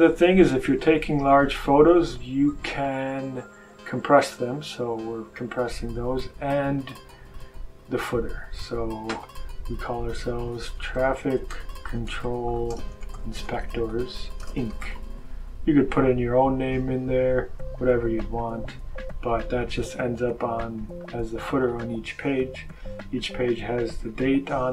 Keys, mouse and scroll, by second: 0.3-0.8 scroll up 1, 2.6 click, 6.7 click, 8.3 click, 9.9-15.3 typing, 18.3 click, 19.7-20.5 scroll down 1, 20.5-21.0 scroll down 1, 21.2-22.5 scroll down 2, 22.5 scroll down 1, 22.9-23.5 scroll up 2, 24.0-24.7 scroll up 1.